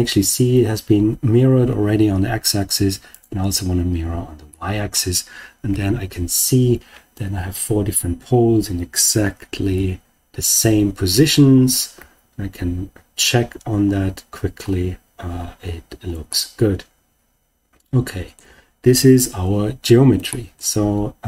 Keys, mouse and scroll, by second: 3.0 click, 4.5-5.0 middle drag, 5.6 KP_7, 9.7 KP_3, 11.9 KP_1, 14.0-14.5 scroll down 1, 14.5-14.9 scroll up 2, 15.5 scroll down 2, 16.2-18.3 middle drag, 20.2 shift+middle click, 20.8-21.1 scroll down 2.